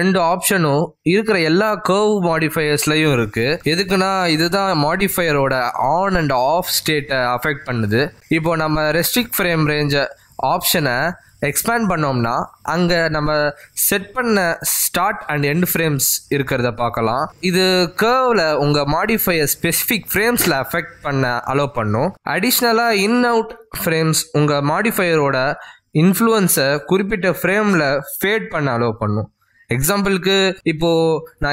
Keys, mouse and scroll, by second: 1.3 click, 17.2 click, 17.8-18.2 scroll down 3, 19.3 click, 29.1 click.